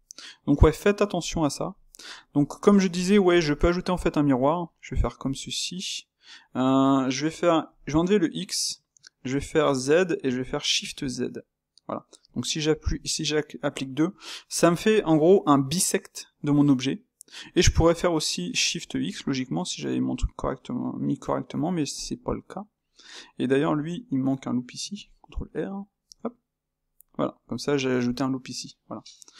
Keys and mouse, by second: 5.7 space, 13.0-22.0 shift+middle drag, 23.1 click, 23.9 Tab, 24.9 ctrl+r, 26.3 Tab, 27.1-29.3 middle drag.